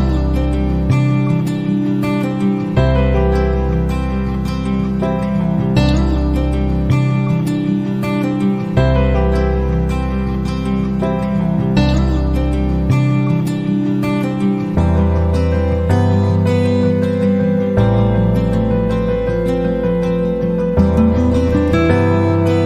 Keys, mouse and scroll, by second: 0.0-0.8 typing, 3.3 click, 4.4 click, 5.8 click, 8.9 click, 9.6 click, 11.7 click, 12.9 click, 14.2 click, 15.8 click, 16.2 click, 17.4 click, 19.2-20.5 drag, 20.7 click, 21.7-22.6 drag.